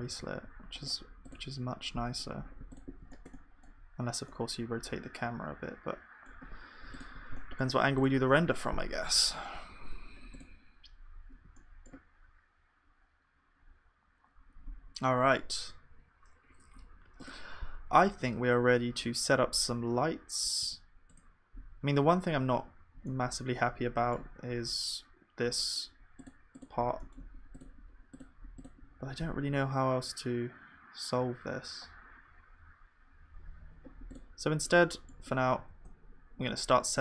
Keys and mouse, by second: 0.1 ctrl+s, 1.7-2.8 drag, 6.5 KP_1, 33.7 KP_1, 35.7-37.0 drag, 35.7 shift+a.